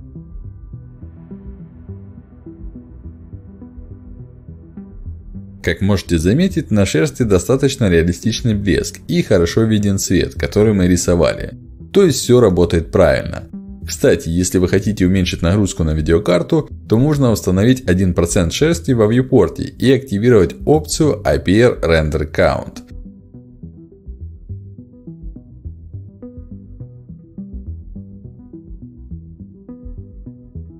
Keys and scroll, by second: 20.7 1, 20.9 Return, 23.8 ctrl+alt+d.